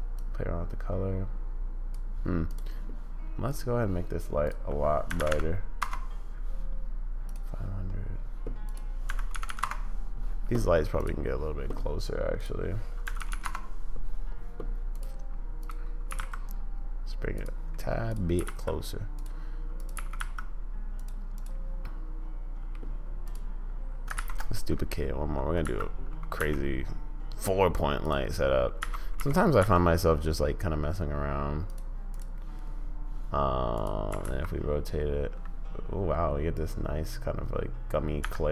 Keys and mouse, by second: 4.4-6.3 drag, 5.3 0, 8.8-10.0 drag, 9.4 0, 12.4-14.0 drag, 13.3 0, 16.1 g, 18.3 g, 20.2 g, 21.9-22.8 middle drag, 24.2 shift+d, 28.9 r, 32.1-32.5 drag, 34.1 r.